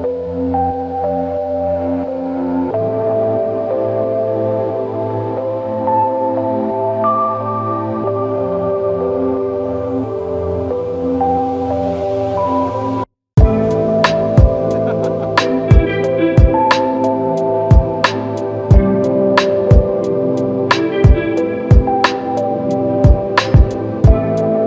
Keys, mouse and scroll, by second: 2.1 typing, 4.8-5.3 typing, 6.5 ctrl+alt+click, 12.5 double click, 15.4 ctrl+alt+click, 18.7 double click, 21.3-21.6 typing, 24.3 double click.